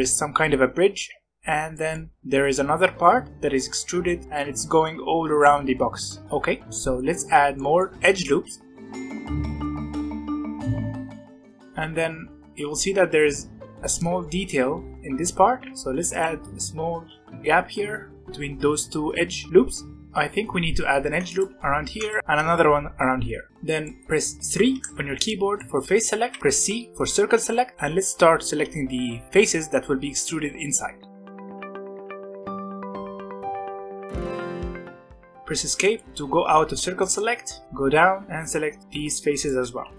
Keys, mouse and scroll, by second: 1.7-3.3 middle drag, 3.7-4.2 scroll down 2, 4.2 middle click, 4.2-6.2 scroll down 1, 6.2-6.7 scroll up 2, 6.7-8.8 middle drag, 8.8 ctrl+r, 10.0 ctrl+r, 12.0-13.3 scroll up 1, 15.8 ctrl+r, 17.2-19.5 shift+middle drag, 20.0 middle click, 20.9 ctrl+r, 21.7 ctrl+r, 22.2-23.5 middle drag, 23.5 scroll up 1, 23.8 middle click, 24.7 3, 25.5 middle click, 26.2 c, 35.0 scroll down 1, 35.0-37.6 middle drag, 37.6 c, 39.9 middle click.